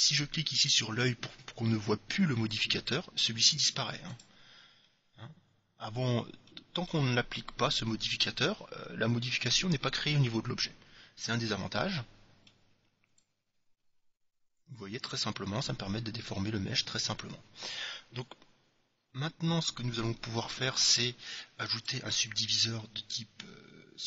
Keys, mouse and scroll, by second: 2.9-5.9 drag, 5.4-8.6 middle drag, 10.0-11.9 middle drag, 13.2-15.0 drag, 21.9-23.7 drag.